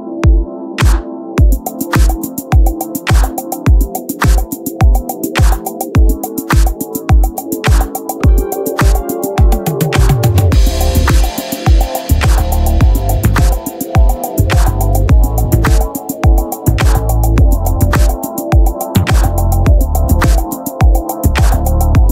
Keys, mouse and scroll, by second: 2.7-4.4 right drag, 3.7 t, 4.4-5.7 drag, 6.5 click, 9.7-11.0 right drag, 10.1-13.0 drag, 14.7 right click, 15.0-17.0 drag, 19.3-21.4 drag.